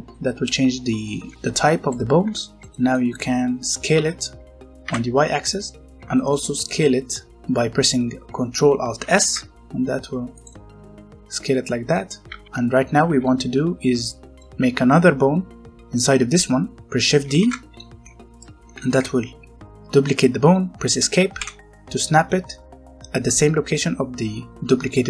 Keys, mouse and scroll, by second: 0.1 middle click, 1.0 shift+middle click, 1.3 click, 2.1 scroll down 1, 2.3 shift+middle click, 3.9 s, 4.8 y, 5.9 middle click, 6.1 shift+middle click, 6.3 scroll up 1, 6.5 middle click, 8.2 ctrl+Num_Lock, 9.0 ctrl+alt+s, 10.3 click, 10.4 middle click, 12.2 alt+a, 12.4 middle click, 12.7 scroll up 1, 13.0 z, 13.4-14.0 scroll up 1, 14.0 middle click, 16.8 shift+Num_Lock, 17.2 shift+d, 17.8 Escape, 18.5 scroll up 1, 18.6 g, 21.3 Escape, 24.4 scroll down 1, 24.5 middle click.